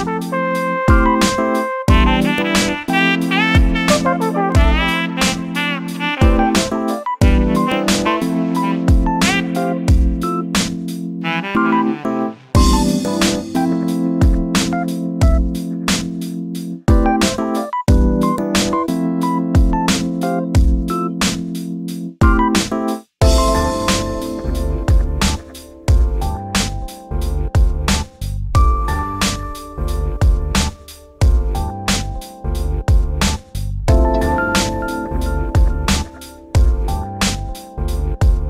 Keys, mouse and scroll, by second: 0.1 KP_7, 1.4 shift+d, 2.9 click, 3.5 g, 5.9 click, 6.7 g, 8.5 click, 9.6 shift+d, 11.5 click, 12.3 g, 13.9 shift+middle click, 14.1 scroll down 2, 14.3-17.0 shift+middle drag, 18.5 click, 20.1 shift+d, 21.7-23.1 scroll up 4, 22.0 shift+middle drag, 23.1 2, 23.3 click, 25.2 shift+d, 28.8 e, 31.6 1, 31.9 click, 32.6 ctrl+shift+b, 35.4 2, 35.7 click, 36.4 x, 38.3 click.